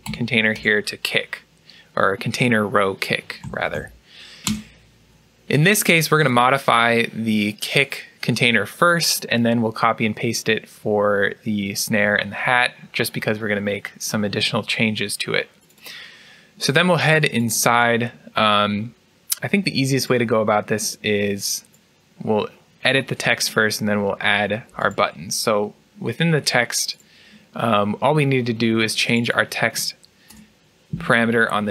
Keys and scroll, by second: 2.9-4.8 typing, 30.2 BackSpace.